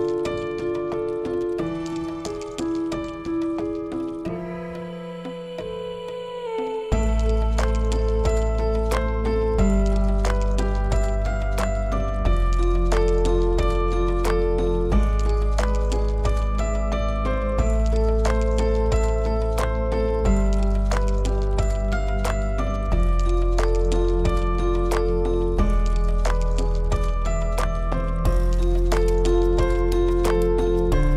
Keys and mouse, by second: 0.2 i, 5.5-6.4 middle drag, 6.5 click, 9.4 e, 11.1 click, 12.3 e, 13.5 click, 13.8-14.8 middle drag, 15.1-16.2 middle drag, 16.7 shift+middle click, 17.2 middle click, 19.0 shift+click, 19.8 shift+a, 20.9 Tab, 22.0 shift+a, 23.4 s, 29.2 g, 31.0 click.